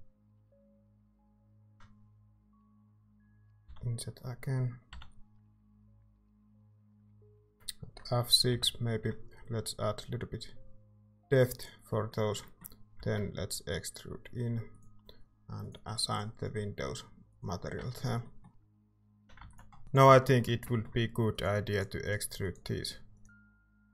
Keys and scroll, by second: 0.8 i, 3.6 i, 4.9 i, 8.5 F6, 13.0 e, 17.8 Tab, 18.6-19.1 typing, 19.4 ctrl+s, 20.0 Tab.